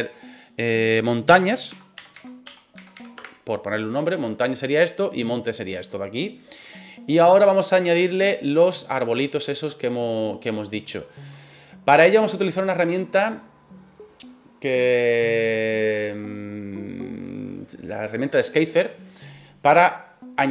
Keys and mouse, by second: 0.0-4.2 drag, 8.5-9.8 middle drag.